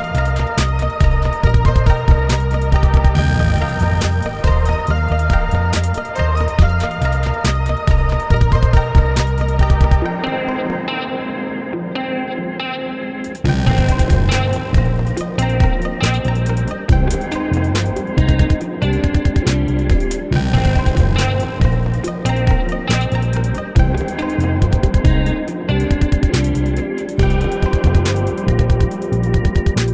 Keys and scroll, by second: 15.4 ctrl+e, 17.2 ctrl+e, 19.7 ctrl+e, 24.1 Escape, 24.4 ctrl+z, 26.1 ctrl+r, 26.9 Escape, 28.5 ctrl+1.